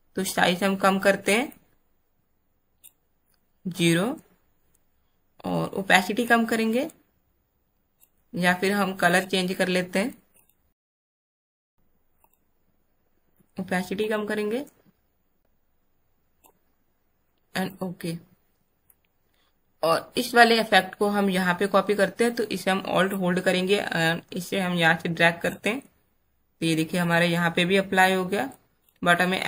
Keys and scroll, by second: 27.8 space.